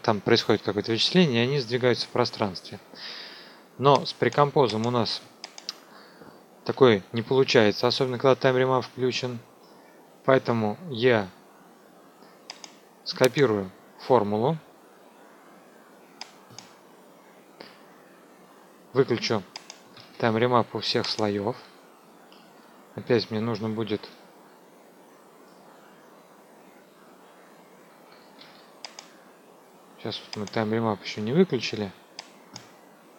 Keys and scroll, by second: 6.6 Delete, 19.9 ctrl+a, 28.3 ctrl+a.